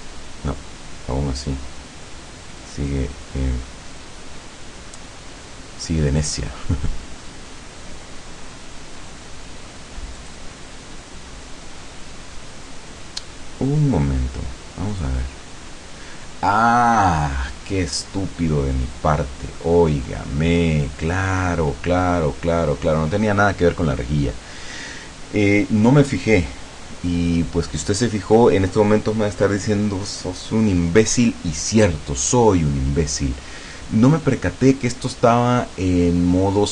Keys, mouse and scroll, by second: 10.2 click, 15.0 click.